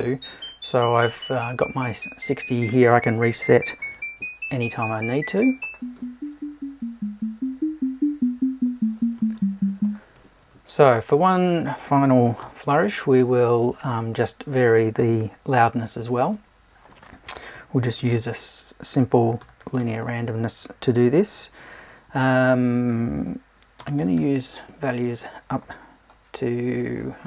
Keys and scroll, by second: 12.4 BackSpace.